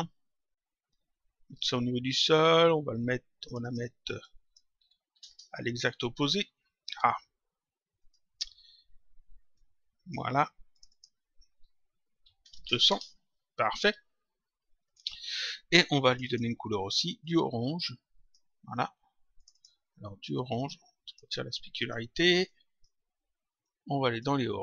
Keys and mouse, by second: 1.4 click, 3.4 click, 5.5 click, 7.9 click, 9.5 click, 10.6 click, 12.9 Return, 14.8 click, 16.0 click, 19.3 click, 21.0 click, 23.6 click.